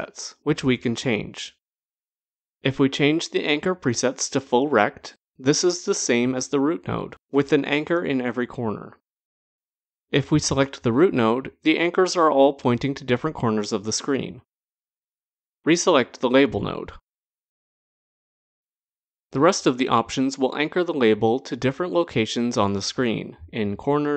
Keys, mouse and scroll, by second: 0.3 click, 2.6 click, 4.8 click, 5.9 click, 13.7 click, 18.5 click, 21.4 click, 23.3 click, 23.4 click, 23.6 click, 23.9 click, 24.1 click.